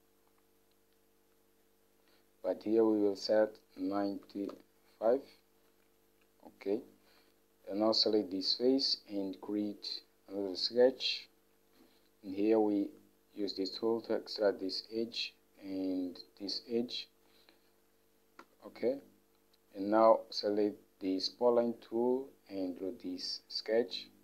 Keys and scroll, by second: 4.4 9, 4.7 5, 7.2 Home, 18.6 Escape.